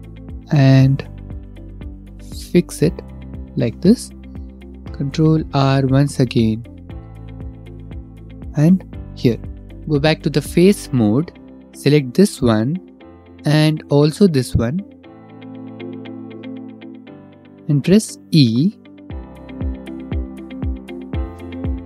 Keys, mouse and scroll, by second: 2.5 click, 2.9 click, 4.2 ctrl+r, 6.5 click, 6.7 ctrl+r, 8.5 click, 8.8 click, 9.6 3, 13.0 click, 15.4 shift+click, 16.8 middle click, 17.2 middle click, 18.3 e, 18.7-19.8 scroll, 20.7 shift+click, 21.1 scroll.